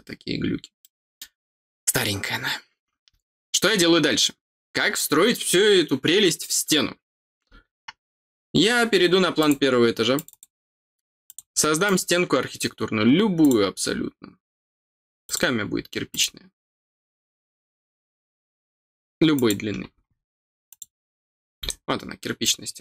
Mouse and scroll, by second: 0.4 scroll down 1, 0.7 middle click, 9.3 click, 10.1 click, 11.2 click, 11.8 click, 13.3 click, 15.2 click, 16.0 click, 19.3 click, 20.6 click, 21.6 middle click, 21.6 scroll down 2, 22.4 middle click.